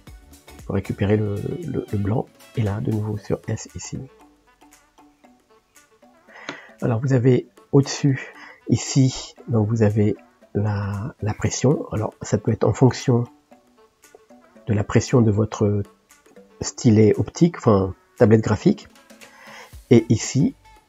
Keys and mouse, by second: 10.6-12.2 drag, 12.9 click, 14.1 click, 14.8 click, 20.7-20.8 drag.